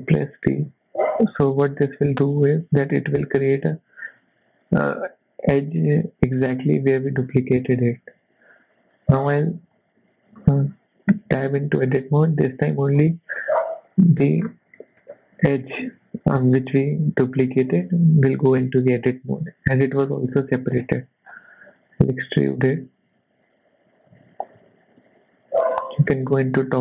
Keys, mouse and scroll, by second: 0.0 p, 1.2 click, 1.8 Tab, 2.7 click, 3.6 g, 11.1 Tab, 11.5 middle click, 12.6 click, 12.9-13.4 scroll down 5, 13.4 middle click, 14.4 scroll up 4, 14.7 shift+middle click, 17.8 middle click, 20.8-21.9 scroll up 2, 21.9-22.5 scroll up 1, 21.9 e, 26.1 KP_7, 26.6-26.8 scroll up 2.